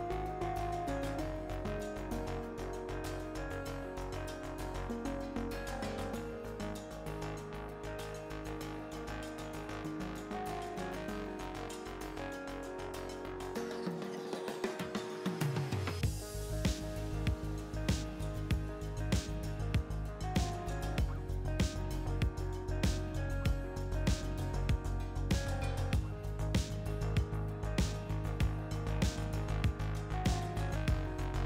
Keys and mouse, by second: 0.7-1.9 drag, 1.9-3.0 middle drag, 3.0-6.3 drag, 6.3 middle click, 6.7 x, 8.4 Tab, 9.3 a, 10.0 KP_7, 11.3 shift+a, 14.2-15.6 drag, 16.7 click, 17.5 middle click, 19.7 middle click, 20.7 click, 20.7 KP_7, 25.3-26.5 drag.